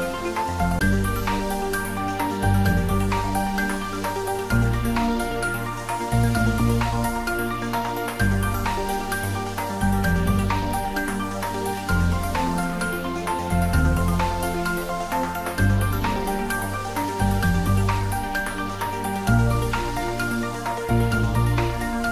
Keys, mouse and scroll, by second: 1.1 click, 6.3-6.7 scroll up 1, 7.5 shift+d, 8.0 z, 10.1 click, 10.4-12.4 middle drag, 12.4 click, 13.9 g, 16.3 click, 17.3 s, 19.8 click, 20.1 middle click, 21.0-22.0 typing.